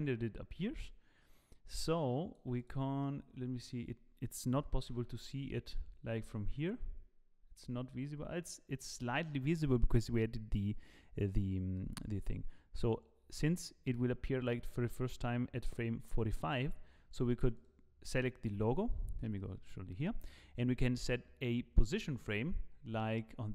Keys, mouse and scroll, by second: 2.6 click, 3.1 middle click, 4.0 scroll down 2, 5.0 KP_0, 6.2-7.1 scroll up 3, 7.1-7.6 scroll up 7, 9.9 scroll down 5, 10.1-11.0 scroll down 5, 11.0 scroll down 4, 11.8 click, 17.6 click, 19.3 z.